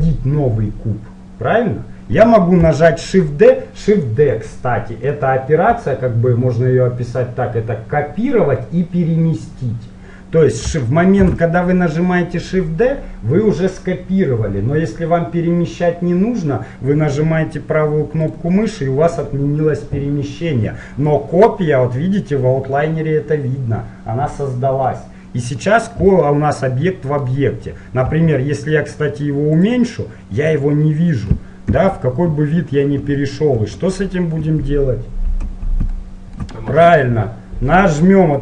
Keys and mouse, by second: 11.3 shift+d, 26.2-28.2 middle drag, 28.3 s, 30.1-31.8 middle drag, 32.0-34.6 typing, 38.0 click.